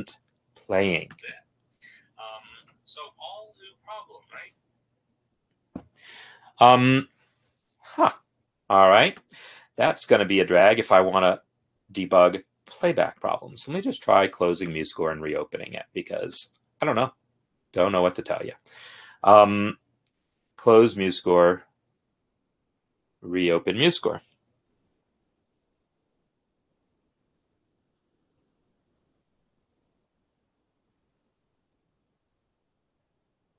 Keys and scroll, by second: 13.0 space.